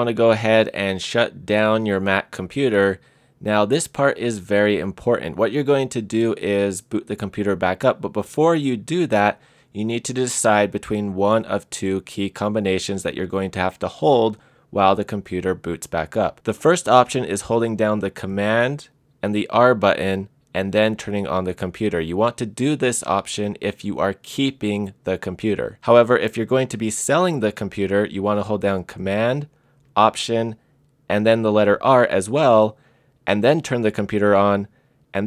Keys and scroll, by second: 19.3 super+r, 31.5 alt+super+r.